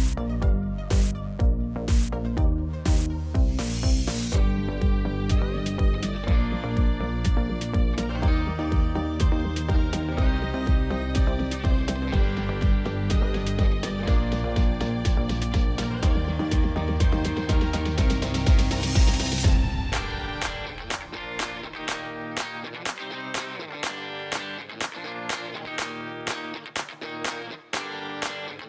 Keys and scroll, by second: 10.8 b, 15.0 b, 22.2 ctrl+i, 23.8 e.